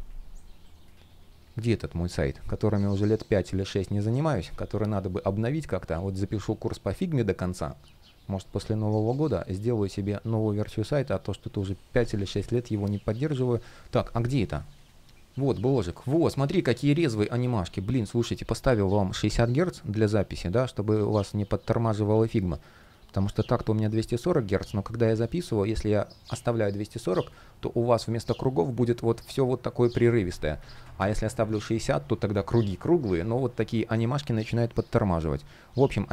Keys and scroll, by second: 30.4 super+z, 32.8 super+z.